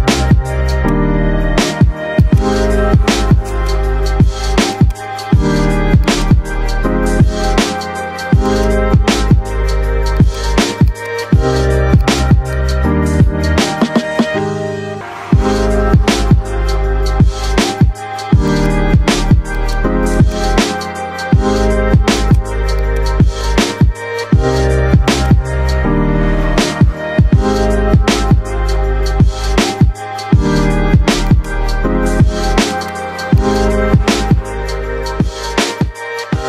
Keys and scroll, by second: 6.6 5, 6.8 Return, 12.8 F3, 35.7 Caps_Lock.